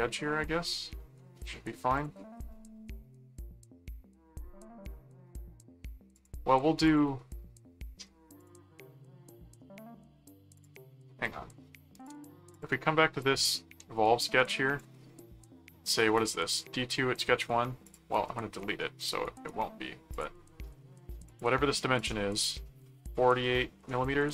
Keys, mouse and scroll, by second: 1.9 click, 6.1 click, 6.8 click, 8.4 click, 9.6 middle click, 10.5 click, 12.0 click, 13.6 ctrl+4, 14.2 ctrl+1, 17.8 click, 19.2 right click, 20.1 click, 21.3 click, 22.0 click.